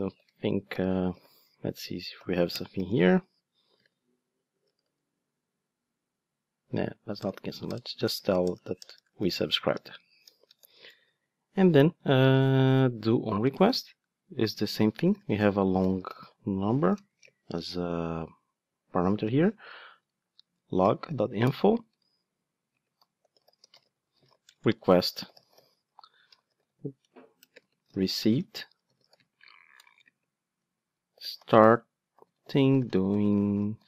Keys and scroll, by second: 2.5 Return, 7.2 alt+BackSpace, 20.5 Return.